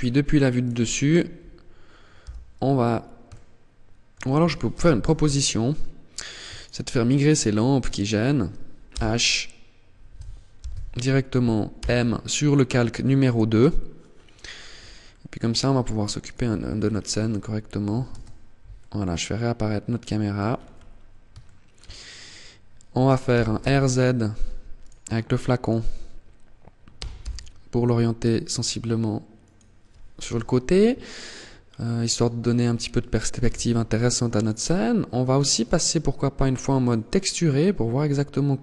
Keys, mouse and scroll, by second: 1.3 h, 2.4 shift+middle click, 3.8 ctrl+z, 4.3 scroll down 4, 5.2 right click, 5.8 shift+right click, 7.0 shift+right click, 8.0 h, 9.8 ctrl+z, 10.9 m, 13.6-14.1 scroll up 5, 14.1 middle click, 15.4 right click, 15.8-16.2 scroll down 6, 17.1 alt+h, 17.9 middle click, 19.6-19.9 scroll up 7, 20.5 shift+middle click, 22.5 r, 23.9 right click, 24.7 right click, 26.0 r, 28.7 click, 29.3 KP_0, 30.6 scroll down 2, 32.5 t, 33.5 right click, 34.7 click, 37.1-37.7 scroll up 1, 37.7 right click, 38.3 right click.